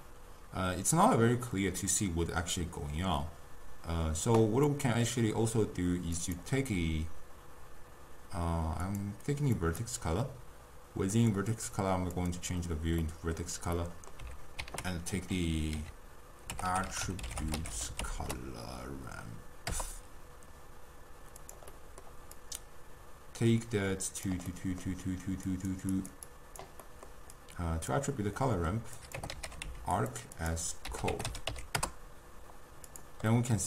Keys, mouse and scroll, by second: 0.1-3.1 middle drag, 4.7-6.2 middle drag, 6.2 click, 8.9-13.1 drag, 13.1-14.7 middle drag, 14.7 ctrl+a, 16.7 t, 21.8 middle click, 22.4-24.6 drag, 24.6-25.6 middle drag, 25.6 click, 26.0 click, 26.4 click, 27.0-27.4 middle drag, 27.4 click, 28.5 middle click, 29.0-30.1 drag, 30.4-33.0 drag, 33.4-33.6 middle drag.